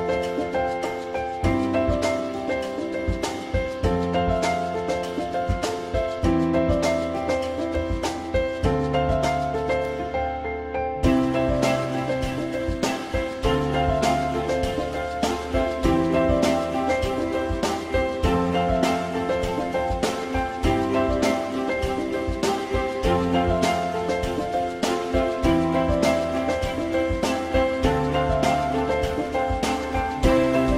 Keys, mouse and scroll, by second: 1.7 click, 2.8 click, 5.1 click, 12.0 click, 16.2 click, 20.9 click, 23.5 ctrl+click, 23.7 ctrl+double click, 24.1 ctrl+click.